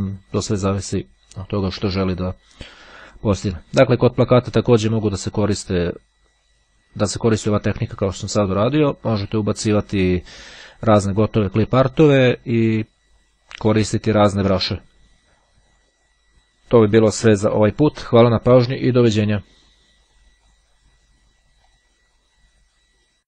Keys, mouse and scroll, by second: 20.4 click, 21.7 click.